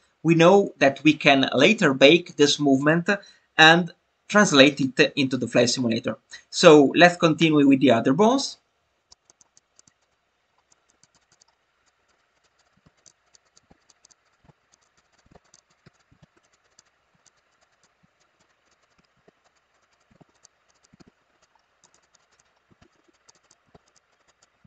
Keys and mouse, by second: 9.2 click, 9.8 click, 10.1 click, 11.0 click, 11.2 click, 11.4 click, 12.0 click, 12.4 click, 12.6 click, 13.1 click, 13.3 click, 13.5 click, 13.9 click, 14.1 click, 14.3 click, 14.8 click, 15.0 click, 15.2 click, 15.5 click, 15.7 click, 16.0 click, 16.5 click, 16.7 click, 16.8 click, 17.2 drag, 17.6 click, 17.8 click, 18.5 click, 18.7 click, 18.9 click, 19.5 click, 19.8 click, 20.0 click, 20.4 click, 20.7 click, 21.4 click, 22.0 click, 22.2 click, 22.4 click, 22.9 click, 23.1 click, 23.3 click, 23.5 click, 23.9 click, 24.2 click, 24.4 click.